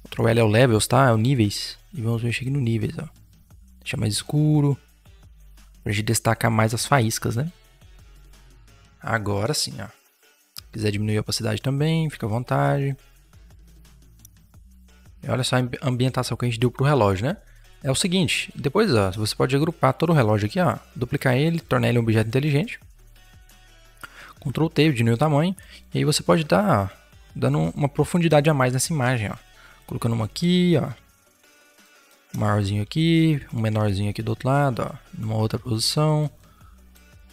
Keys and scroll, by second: 1.0 ctrl+l, 14.1 Return, 14.4 v, 19.9 ctrl+g, 23.3 ctrl+t, 28.1 Return, 28.8 v, 30.6 ctrl+t, 32.2 Return, 33.5 ctrl+t.